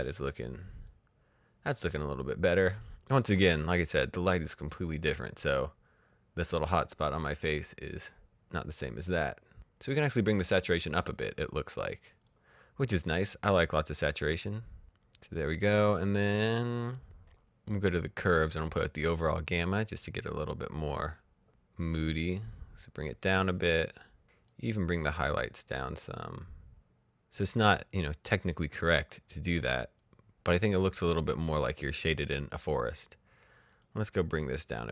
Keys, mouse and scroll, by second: 7.4 click, 10.2 click, 12.1 click, 15.9 click, 17.0 click, 20.3 click, 33.5 click, 34.2-34.7 scroll down 1.